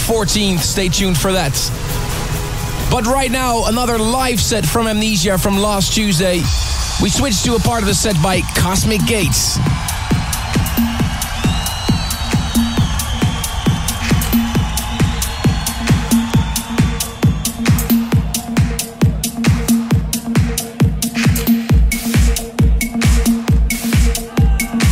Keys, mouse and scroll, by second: 2.2-2.8 scroll up 1, 2.8-4.6 scroll down 1, 4.6 click, 6.1-9.0 scroll up 1, 9.0-18.1 drag, 19.2-24.9 scroll down 1.